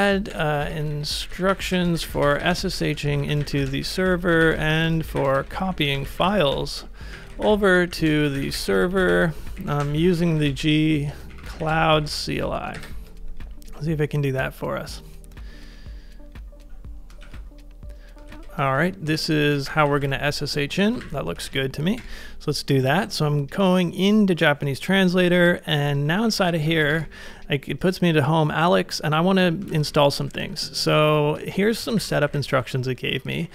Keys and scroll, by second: 0.0-2.6 typing, 4.1 typing, 5.5 typing, 6.9-9.4 typing, 12.7 ctrl+s, 17.3 ctrl+a, 18.4 ctrl+c, 19.1 ctrl+v, 20.0 ctrl+w, 20.9 ctrl+a, 21.5 super+v, 21.6-22.3 typing, 26.1-27.3 typing, 29.7 ctrl+a, 29.8 k, 30.3 ctrl+u, 30.9 ctrl+u, 31.2-33.5 typing, 32.7 ctrl+c.